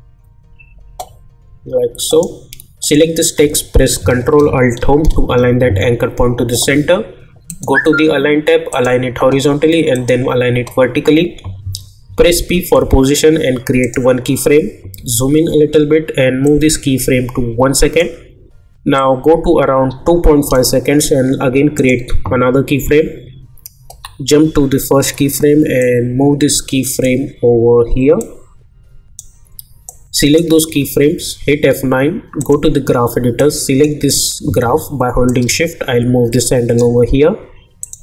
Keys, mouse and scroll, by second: 5.1 ctrl+alt+Home, 7.5 click, 12.2 p, 13.8 click, 14.9 =, 16.4-21.8 drag, 25.8-31.2 drag, 31.2 F9, 32.4-37.8 drag.